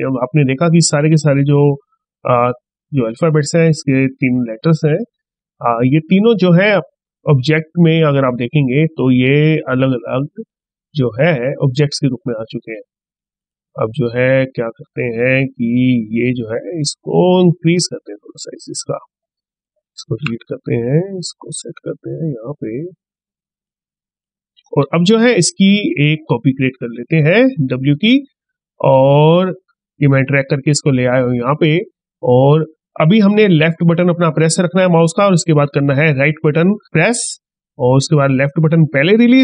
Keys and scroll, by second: 20.7 ctrl+z.